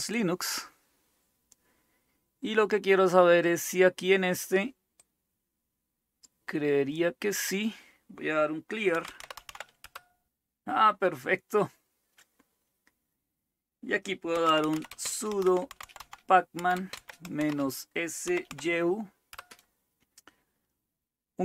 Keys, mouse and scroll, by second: 0.0-1.4 drag, 4.8-6.9 drag, 8.7-9.9 typing, 14.2-18.5 typing, 19.3 Return.